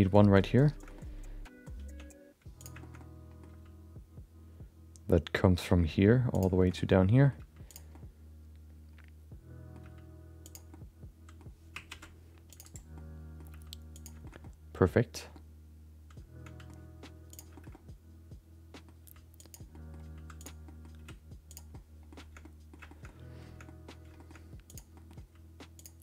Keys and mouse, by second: 0.8 shift+middle click, 0.9 middle click, 1.8 Tab, 2.6 click, 2.8 shift+middle click, 3.1 middle click, 3.6 g, 6.6 shift+middle click, 6.7 middle click, 7.4 g, 7.9-9.7 middle drag, 9.8 g, 10.7 middle click, 11.9 ctrl+r, 12.9 middle click, 13.5 g, 14.2 shift+middle click, 14.4 middle click, 15.3-16.6 middle drag, 17.3 click, 17.5 middle click, 17.7-18.8 middle drag, 19.0 g, 19.7 middle click, 20.0 g, 20.6 middle click, 20.9 r, 21.7 middle click, 22.4 middle click, 22.9 shift+middle click, 23.6 middle click, 24.1 shift+middle click, 24.7 click, 24.9 middle click, 25.2 g.